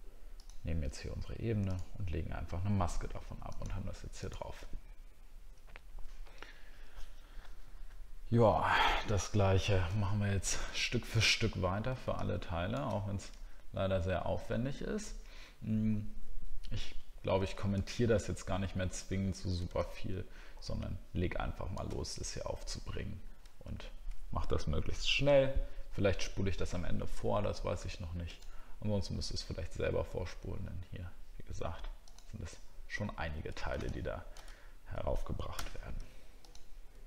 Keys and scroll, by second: 4.7 alt+scroll down 2, 10.8 alt+scroll up 1, 17.8 alt+scroll up 1, 18.7 alt+scroll down 1, 33.4-34.4 alt+scroll down 1.